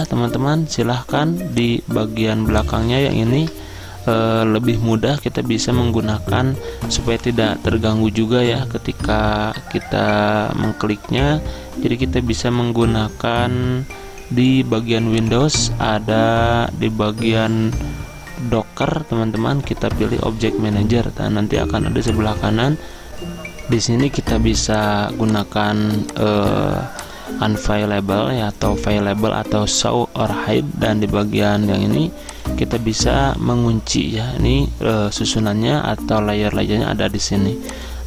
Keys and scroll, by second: 3.4 ctrl+z, 23.1 alt+Tab.